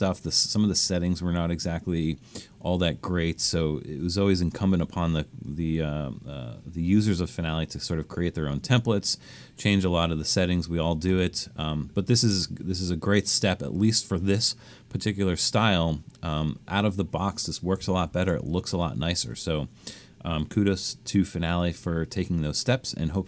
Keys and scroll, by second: 18.0 super+-.